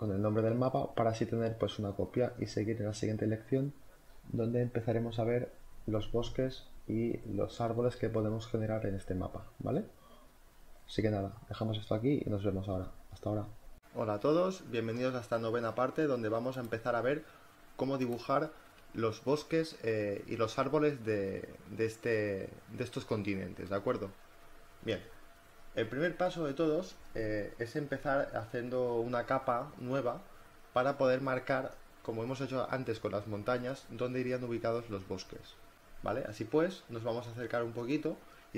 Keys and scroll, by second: 20.8 b, 31.2 z, 32.6 b, 33.0 [.